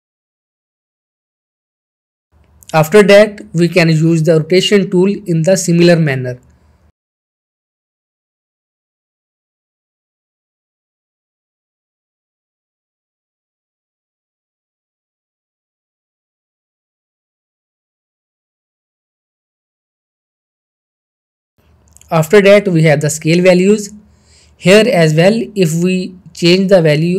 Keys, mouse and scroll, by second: 2.0-2.6 middle click, 2.5 scroll up 1, 2.7 shift+middle click, 2.7 shift+middle click, 3.2-3.5 scroll up 1, 4.0-5.1 shift+middle click, 7.3 middle click, 7.5-8.5 drag, 8.8 ctrl+z, 9.4 click, 10.7 middle drag, 12.4 ctrl+z, 12.8 click, 13.7 middle click, 14.1 ctrl+z, 14.4 click, 16.0 middle click, 16.5 click, 17.1-17.4 middle click, 18.1 scroll up 2, 18.3 middle click, 18.5-18.8 shift+middle drag, 21.0 shift+middle click, 21.3-21.6 click, 21.8 ctrl+z, 25.2 scroll down 1, 26.2-27.1 drag.